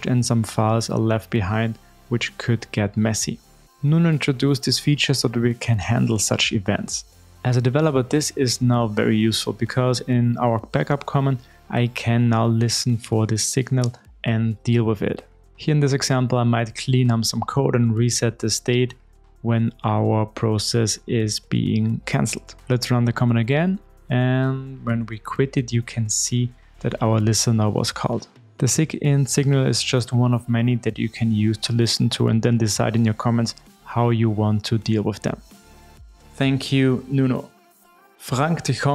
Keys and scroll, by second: 6.2 super+v, 23.0 alt+F12.